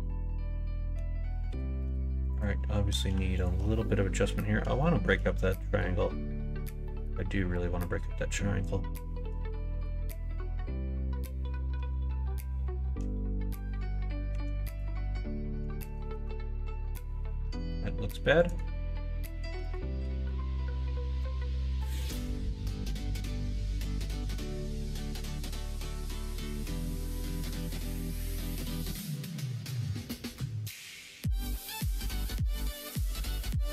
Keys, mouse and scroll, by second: 1.5 2, 3.3 click, 4.8 shift+middle click, 5.6 middle click, 6.8 middle click, 14.3 1, 15.8 ctrl+b, 17.5 ctrl+z, 18.4 click, 19.6 click, 20.0 2, 20.2 click, 21.2 x, 23.2 1, 23.7 click, 24.5 ctrl+b, 30.8 ctrl+z, 31.4 middle click.